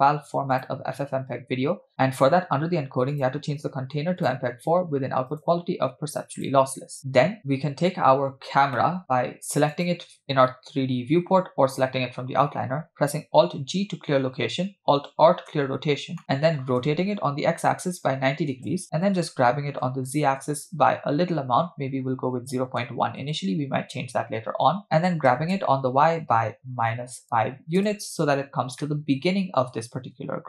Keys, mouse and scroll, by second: 1.1-1.4 scroll down 2, 1.9 click, 2.2-3.1 scroll down 2, 3.2-4.3 drag, 5.3-6.5 drag, 7.0 scroll down 4, 7.7 scroll down 1, 8.3-8.7 scroll down 2, 8.8 shift+middle drag, 9.7 click, 14.3 alt+g, 15.6 alt+r, 16.0 scroll down 1, 16.2 middle click, 16.9 r, 19.2 g, 25.3 g, 28.8-29.2 middle drag.